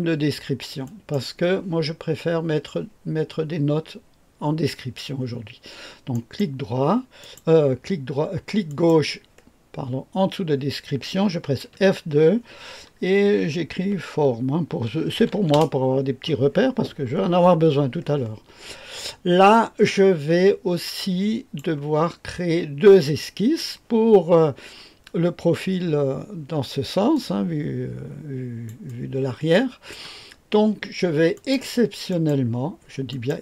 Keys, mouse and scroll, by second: 0.8 click, 6.1 click, 6.1 right click, 7.2 click, 8.6 click, 11.7 F2, 13.0-17.0 typing, 19.5-21.6 drag, 27.1-28.7 drag, 31.3 click, 32.1 click, 33.1 click.